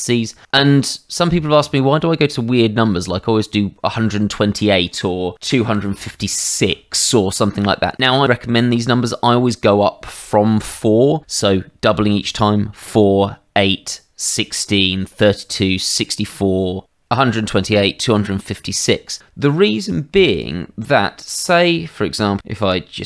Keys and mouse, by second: 4.6 click, 5.6 KP_2, 5.8 KP_5, 5.9 KP_6, 6.6 Return, 20.3 click, 21.1 shift+middle click, 21.4 click, 22.6 g, 22.9 z.